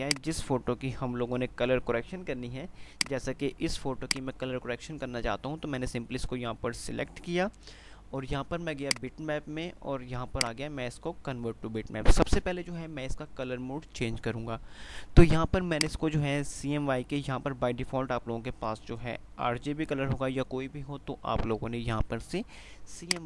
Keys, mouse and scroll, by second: 3.1 ctrl+click.